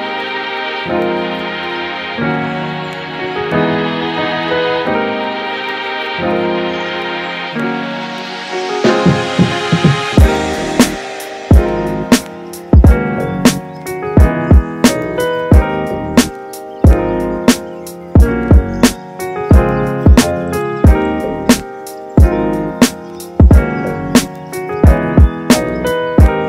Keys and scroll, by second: 0.1 space, 1.3 x, 19.3 space, 24.1 space.